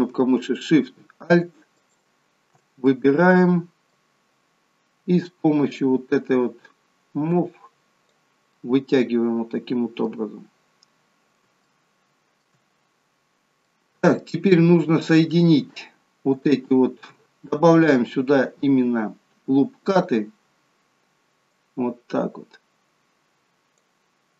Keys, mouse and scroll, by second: 1.7 alt+shift+click, 2.9 middle click, 4.2-4.5 scroll down 1, 5.8 click, 8.5 middle click, 10.7-11.6 scroll down 3, 11.6 shift+middle click, 13.6 middle click, 14.7 middle click, 16.0 scroll up 2, 16.5 shift+middle click, 19.9 click, 21.5 click.